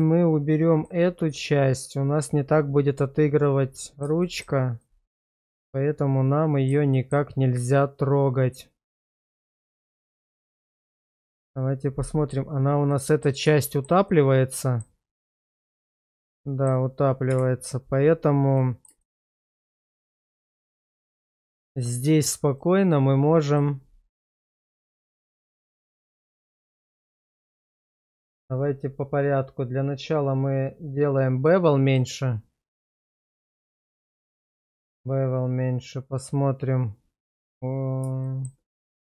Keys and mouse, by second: 0.5 middle click, 3.4-4.0 middle drag, 4.2 shift+middle drag, 4.8-6.7 middle drag, 6.9 shift+middle drag, 7.8-10.7 middle drag, 12.9-13.2 middle drag, 13.6 shift+middle click, 14.1 middle click, 15.4 shift+middle drag, 15.8 middle click, 18.6 middle drag, 19.0 shift+middle click, 19.8 shift+middle click, 20.3-21.3 middle drag, 21.9 Tab, 23.6-26.7 middle drag, 27.9 shift+middle click, 31.5 click, 31.9 click, 33.4 shift+middle click, 33.9 middle click, 34.6 shift+middle click, 36.2 click, 38.2 shift+middle drag, 38.8 middle drag.